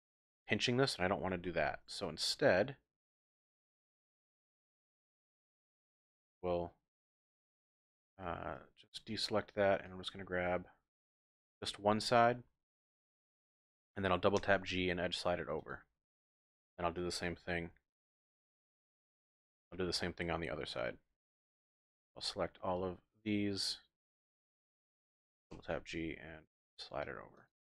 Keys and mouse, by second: 1.5 ctrl+z, 2.0 click, 2.6 middle click, 3.5 KP_3, 4.1 z, 5.0 click, 5.9-7.5 drag, 7.6 click, 8.2 shift+click, 10.0-11.5 drag, 11.9 z, 14.4 g, 14.5 g, 15.6 click, 18.0 alt+click, 19.0 KP_3, 19.7 shift+click, 20.5 z, 21.8-23.3 drag, 24.2 z, 25.5 g, 25.7 g, 27.3 click.